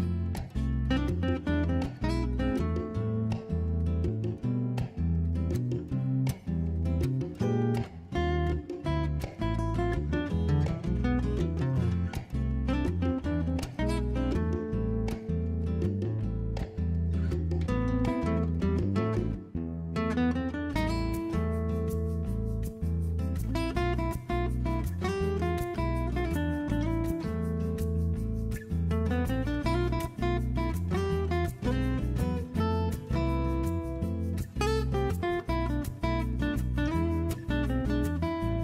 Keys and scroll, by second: 0.0-0.7 typing, 8.5-9.3 typing, 19.3-21.1 typing, 24.0 v, 26.1 b, 31.8-32.5 typing, 35.9 super+j, 36.3 super+t, 37.9 v.